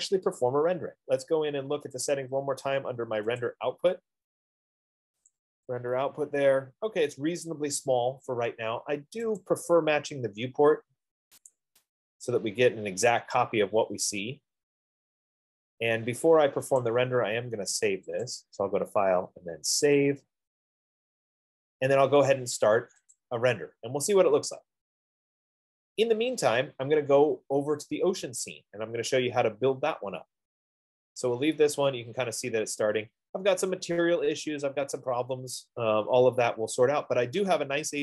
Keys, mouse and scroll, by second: 2.4 click, 3.6 click, 5.8 click, 9.7 click, 11.9 click, 15.5-16.9 drag, 17.3-18.7 drag, 20.3 click, 23.4 click, 27.5 click.